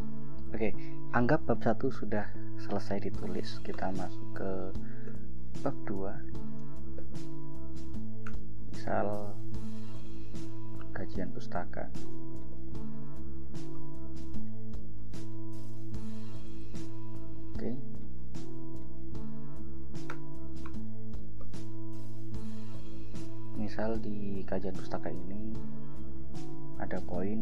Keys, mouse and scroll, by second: 0.5 click, 3.9 ctrl+Return, 5.1 ctrl+e, 5.9-7.2 typing, 8.4 shift+Return, 10.7-14.5 typing, 16.5 click, 17.7 scroll down 2, 18.6 click, 20.3 Return, 21.5 ctrl+j, 23.5 click, 26.3-27.4 typing.